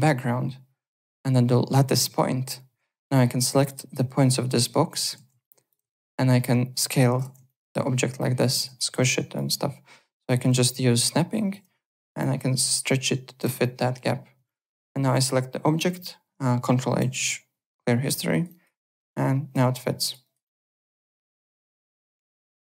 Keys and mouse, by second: 0.0 ctrl+right click, 3.0 click, 3.9 alt+click, 4.6 click, 5.1 ctrl+z, 5.4 click, 5.9 alt+click, 6.4 click, 7.2 ctrl+z, 7.4 alt+click, 8.2 click, 8.5 ctrl+z, 8.7 alt+click, 9.0 click, 10.2 click, 10.9 v, 11.0 click, 11.9 click, 12.4 v, 12.8 click, 13.4 v, 13.6 click, 14.4 click, 15.1 click, 17.0 ctrl+h, 18.0 click, 18.3 alt+right click, 18.4 alt+click, 18.8 click, 19.0 alt+click, 20.2 alt+right click, 20.4 alt+click, 21.3 alt+Tab.